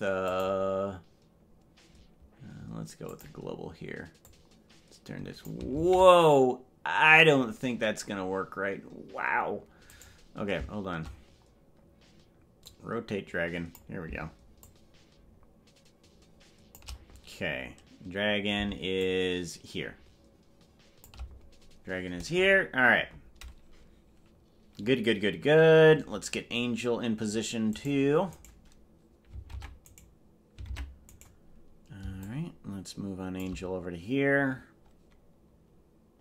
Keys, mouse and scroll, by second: 0.3-3.6 drag, 4.3-5.6 drag, 7.0 ctrl+z, 10.2 right click, 12.7-13.9 drag, 14.7-16.8 shift+drag, 19.0-21.2 shift+drag, 27.0 scroll down 1, 28.4 right click, 29.6 ctrl+Tab, 30.0 right click, 30.8 ctrl+Tab, 31.4 right click, 32.2 shift+click.